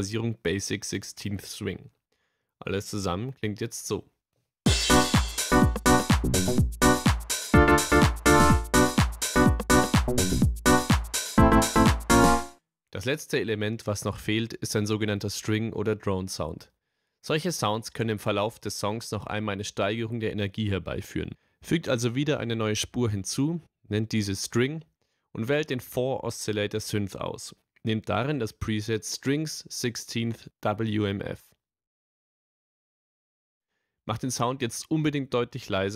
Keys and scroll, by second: 4.6 space, 13.5 space, 20.9 t, 22.0-23.3 typing, 23.4 Return.